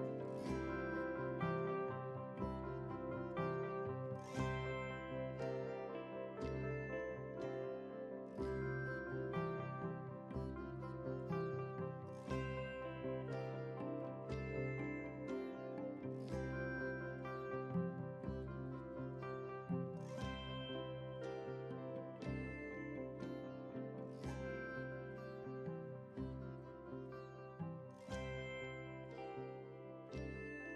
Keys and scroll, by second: 29.4 ctrl+g.